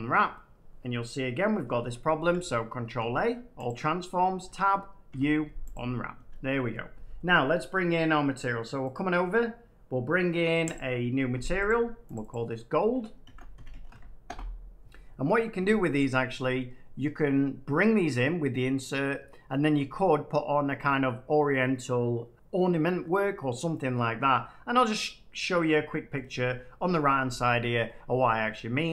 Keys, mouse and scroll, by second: 1.7 Tab, 2.9 ctrl+a, 3.6 click, 4.3 Tab, 5.0 u, 5.7 click, 6.1 Tab, 8.8 click, 10.7 click, 11.6 click, 12.1 click, 12.2 click, 13.2-13.9 typing, 14.2 Return, 16.4 middle click, 26.1 click.